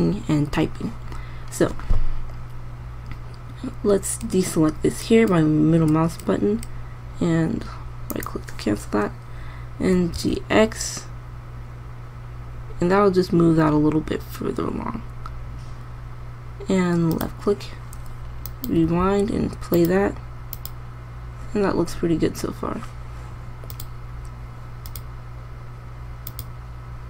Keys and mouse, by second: 8.8-10.6 drag, 10.4 g, 19.3 alt+a, 24.3-25.1 drag.